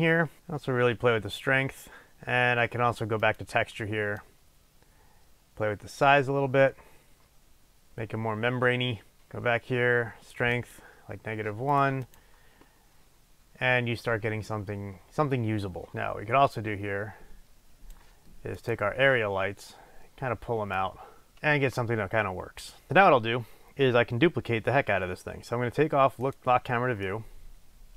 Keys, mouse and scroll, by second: 0.4-3.4 drag, 4.4-9.4 drag, 10.6 click, 11.8 click, 12.1 click, 16.7-18.8 drag, 20.8 click, 26.3 click, 27.2-27.9 middle drag.